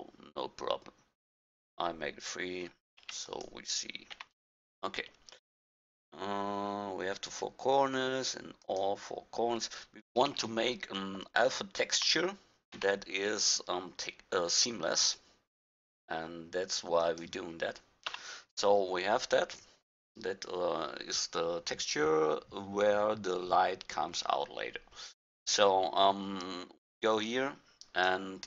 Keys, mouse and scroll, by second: 3.0 shift+d, 4.1 g, 10.3 shift+d, 18.1 Tab, 25.6-28.4 drag.